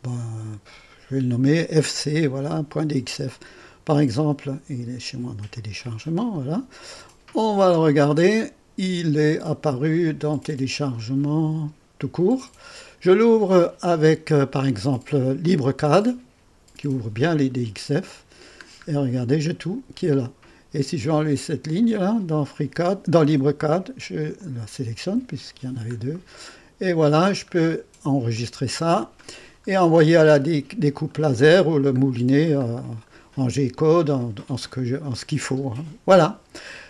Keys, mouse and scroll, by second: 0.0 click, 0.9 click, 5.5 click, 7.6 click, 10.9 click, 15.4 click, 17.2-18.6 scroll down 6, 21.8 click, 23.2 Delete, 24.3 click, 25.1 Delete, 25.5-25.9 scroll down 1, 25.9-26.7 scroll up 1, 27.5 scroll down 1, 28.3 middle click, 29.2-29.8 scroll up 1, 29.8-31.0 scroll down 1, 31.0-32.3 middle drag, 32.3-33.0 scroll down 1.